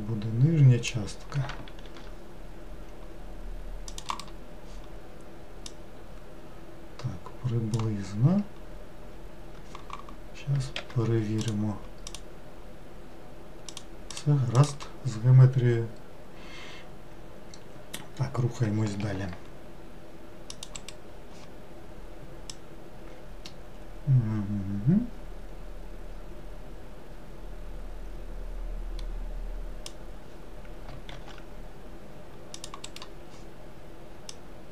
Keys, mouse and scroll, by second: 1.8 ctrl+r, 5.7 click, 11.4 click, 12.1 click, 13.7 click, 14.1 click, 14.5 click, 19.0 ctrl+r, 22.5 click, 31.1 ctrl+r, 34.3 click.